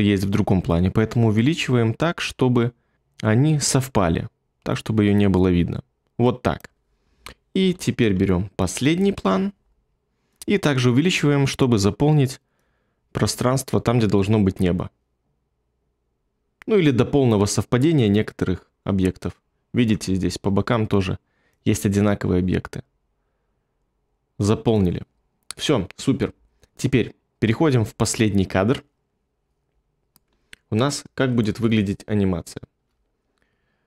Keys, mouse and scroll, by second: 31.7 ctrl+middle click, 31.9 ctrl+middle click.